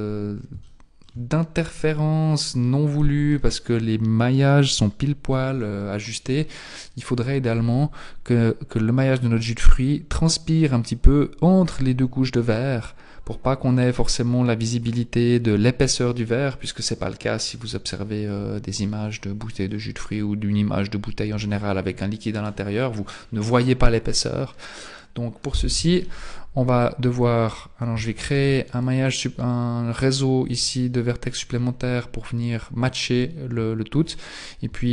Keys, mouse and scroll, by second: 0.8 shift+middle click, 1.5-2.0 scroll up 3, 18.0 shift+middle click, 18.6-19.2 scroll down 2, 19.0 shift+middle click, 20.4-21.1 scroll up 2, 25.8 Tab, 28.4 ctrl+r, 30.4 Tab, 32.9-33.6 scroll up 2, 34.1-34.8 scroll down 1, 34.8 shift+middle click, 34.8 scroll down 5.